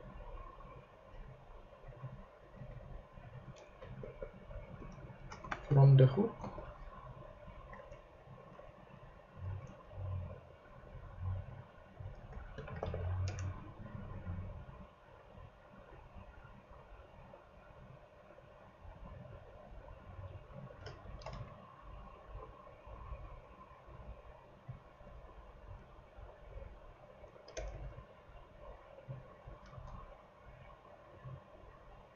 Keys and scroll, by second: 2.6 super+c, 3.5-5.5 typing, 6.0 shift+super+v, 6.4 super+;, 7.1 ;, 12.3-13.3 typing, 21.0 shift+super+Right, 21.3 shift+super+c, 22.3 super+c, 25.7 Up, 27.3 super+Right, 27.5 super+Return, 27.7 super+v, 29.8 Left.